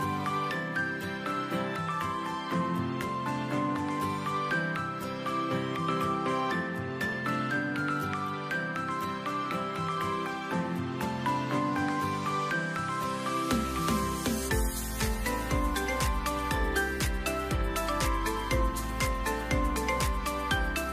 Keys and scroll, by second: 0.3 shift+Right, 4.5 v, 10.0 typing, 11.5 typing, 11.9 Return, 20.0 shift+Left, 20.2 shift+Left, 20.3 shift+Left.